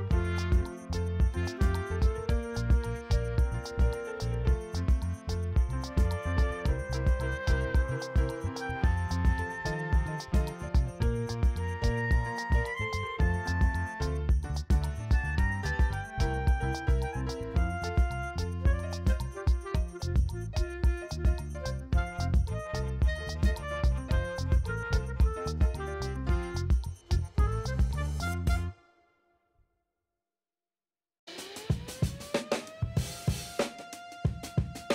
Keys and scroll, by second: 1.3 ctrl+d, 5.0 ctrl+j, 5.2 ctrl+t, 6.9 ctrl+], 7.1 v, 7.6 ctrl+t, 12.7 Return, 12.9 e, 13.2 [, 15.0 v, 16.0 space, 17.5 space, 20.3 ctrl+e, 20.8 space, 21.2 space, 23.4 alt+space, 23.5 v, 25.0 ctrl+space, 25.6 l, 30.0 space, 30.8 space, 32.7 BackSpace.